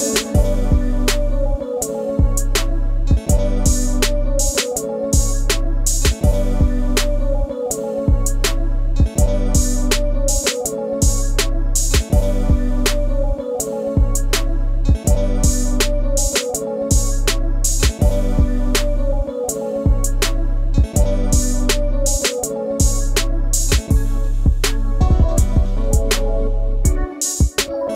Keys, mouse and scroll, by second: 0.4 click, 0.6-1.7 middle drag, 1.7 e, 4.4 Tab, 4.6 click, 5.1-7.6 middle drag, 7.6 scroll down 1, 7.7-21.8 shift+middle drag, 21.8 click, 25.3-27.0 right drag, 27.0 click.